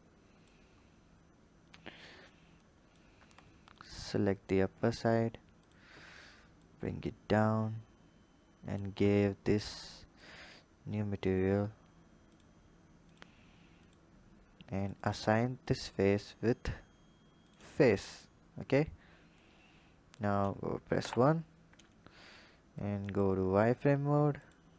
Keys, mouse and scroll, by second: 0.8-1.5 scroll up 2, 1.5-2.5 scroll up 2, 2.5 click, 3.1 Tab, 3.6 click, 4.7 click, 5.5 click, 6.5 click, 10.0 click, 12.1 click, 12.9-18.6 drag, 19.3 click, 20.8 KP_1, 21.9 KP_1, 22.7 click, 23.4-24.2 scroll up 3, 24.2 click.